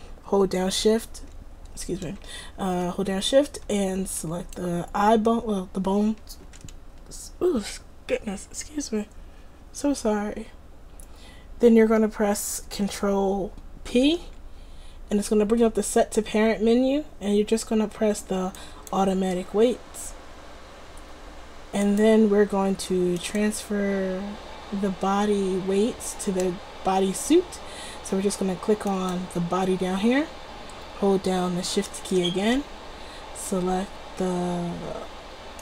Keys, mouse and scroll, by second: 4.3-5.9 drag, 5.9-14.0 right drag, 14.0 ctrl+p, 21.9-23.5 drag, 23.5-25.2 right drag, 29.0-30.8 right drag.